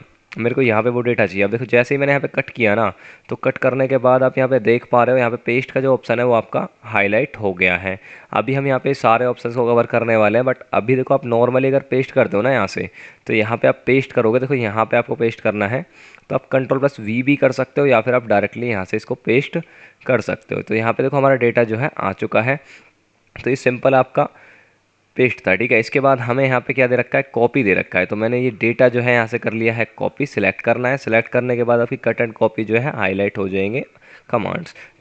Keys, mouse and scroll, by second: 0.6 Return, 20.0 F9, 26.3 scroll up 1.